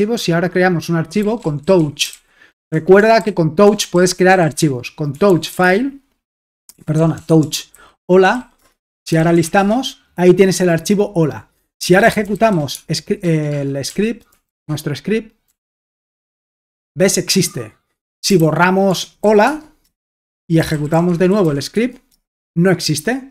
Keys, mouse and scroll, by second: 1.0-10.0 typing, 11.6-16.1 typing, 16.2 Return, 18.0-19.2 typing, 19.4 Tab, 19.8 Return, 20.3-23.3 typing.